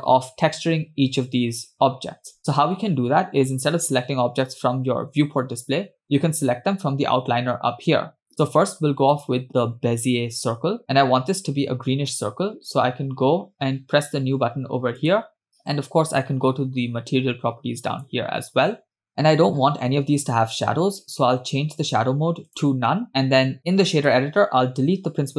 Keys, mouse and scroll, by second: 7.1-9.1 scroll down 4, 9.1 scroll down 1, 9.1 click, 15.0 click, 18.9 click, 19.2-21.8 scroll down 2, 21.8 scroll down 2, 21.8-23.1 drag, 24.0 click.